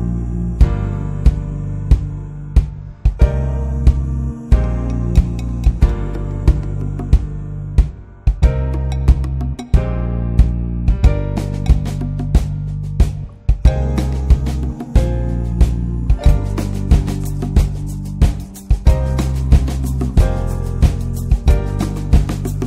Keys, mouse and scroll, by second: 3.2-3.5 drag, 3.5 scroll down 2, 3.8-4.4 middle drag, 4.4-4.7 drag, 4.7-5.1 scroll up 2, 5.1-6.5 middle drag, 6.5-10.2 drag, 10.2 scroll down 2, 10.5-11.5 middle drag, 11.5-12.2 scroll up 2, 11.8 middle click, 12.2 middle click, 12.7 scroll down 2, 13.0-13.7 shift+middle drag, 13.7-14.2 scroll up 3, 14.4-18.1 middle drag, 18.1-21.0 drag.